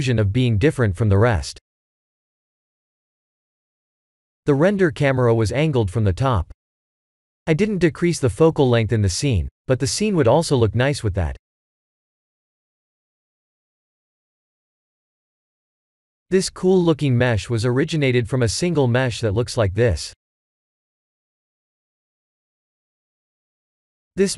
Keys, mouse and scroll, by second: 0.5 click, 2.2 KP_Decimal, 3.4 middle click, 6.9-7.4 scroll down 9, 7.7 middle click, 8.4 middle click, 9.6 click, 10.2 KP_Decimal, 11.6 middle click, 14.2 click, 14.6 middle click, 16.1 middle click, 17.9 click, 18.3 click, 19.5 click, 20.5 KP_Decimal, 21.7 middle click.